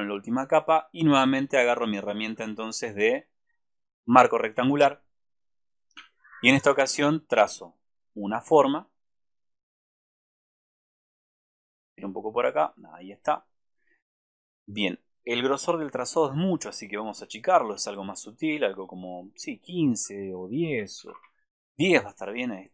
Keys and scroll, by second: 2.3 super+=, 6.1 super+-.